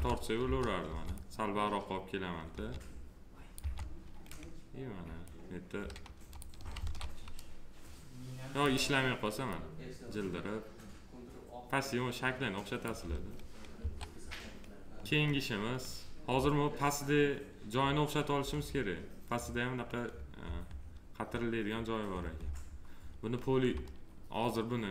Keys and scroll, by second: 2.4 F3, 6.7 ctrl+z, 13.7 1.